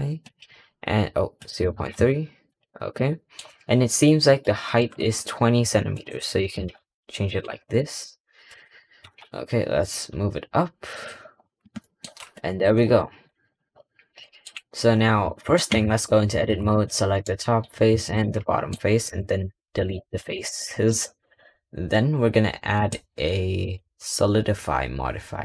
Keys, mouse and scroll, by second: 1.3-2.5 drag, 2.8-3.3 middle drag, 3.3 scroll up 4, 4.2 scroll up 1, 4.3-5.9 shift+middle drag, 5.9-7.3 drag, 7.5 scroll down 3, 7.7 middle click, 8.3 scroll up 4, 8.4 click, 8.6 scroll down 1, 8.9 g, 11.3 scroll up 1, 11.7-12.5 middle drag, 12.9 middle click, 13.2 scroll down 2, 13.4 scroll up 1, 13.6-14.1 scroll down 1, 14.1-14.5 shift+middle drag, 14.5-15.3 scroll up 5, 15.3 shift+middle click, 15.6 Tab, 16.0 scroll down 2, 16.4 3, 16.6 click, 17.1 middle click, 17.9 shift+click, 18.3 middle click, 18.9 Delete, 20.1 Tab, 20.4-20.8 shift+middle drag, 20.8-22.6 shift+scroll up 2, 22.6 click.